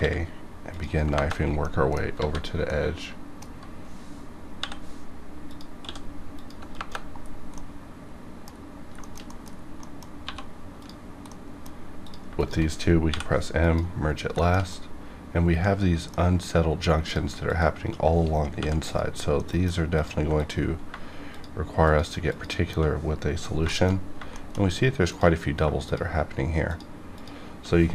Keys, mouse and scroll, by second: 0.6 click, 1.0 KP_Enter, 1.6 middle click, 2.2 alt+a, 2.6-4.5 middle drag, 4.5 k, 5.4 click, 6.3 click, 6.6 KP_Enter, 7.2 scroll down 1, 7.5 middle click, 8.4 scroll up 1, 8.5 scroll down 1, 9.0 shift+middle click, 9.4 middle click, 9.4 scroll up 1, 9.8 middle click, 9.8 scroll down 1, 10.0 scroll up 1, 10.2 1, 10.8 click, 11.1 scroll up 1, 11.2 middle click, 11.7 scroll up 1, 12.0 click, 12.3 shift+click, 13.0 m, 13.5 click, 14.0 scroll down 1, 14.3 shift+middle click, 14.7-17.0 middle drag, 17.0 click, 17.4 shift+click, 18.5 shift+click, 18.8 m, 19.3 middle click, 19.9 click, 20.0 click, 20.3 shift+click, 23.0 scroll up 1, 23.7 shift+middle click, 23.9 shift+scroll up 2, 24.3 shift+middle click, 24.5 shift+scroll up 1, 25.1 click, 25.3 scroll up 1, 25.8 shift+click.